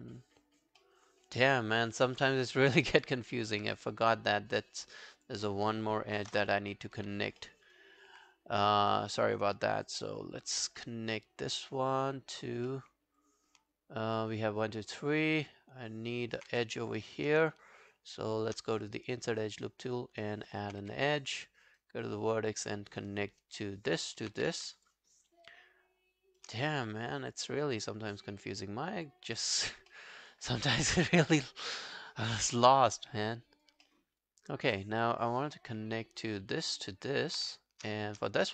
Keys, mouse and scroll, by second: 0.8 alt+middle click, 1.3 alt+scroll down 1, 1.6 alt+click, 2.2 alt+middle click, 2.5 alt+right click, 2.7 alt+click, 3.3 alt+right click, 3.9 right click, 6.3 ctrl+BackSpace, 7.4 alt+middle click, 7.7 alt+right click, 8.4 right click, 10.1 scroll down 1, 10.4 alt+click, 10.8 alt+middle click, 11.2 alt+click, 11.9 alt+right click, 12.2 alt+click, 12.7 alt+middle click, 13.2 alt+click, 14.7 alt+scroll down 1, 15.0 alt+click, 16.1 alt+right click, 16.5 w, 16.7 right click, 17.6 shift+right click, 20.2 alt+middle click, 20.5 alt+right click, 20.8 w, 21.2 right click, 22.8 scroll down 2, 23.0 alt+click, 23.6 alt+middle click, 23.8 alt+right click, 24.0 alt+click, 24.3 q, 24.8 shift+click, 25.2 shift+right click, 26.8 alt+middle click, 27.1 alt+click, 27.5 alt+right click, 27.8 alt+click, 29.3 alt+middle click, 29.6 alt+right click, 29.9 alt+middle click, 30.3 alt+click, 31.2 alt+middle click, 31.4 alt+right click, 31.7 alt+click, 33.9 alt+middle click, 34.3 alt+click, 35.3 alt+click, 36.8 alt+click, 38.4 right click.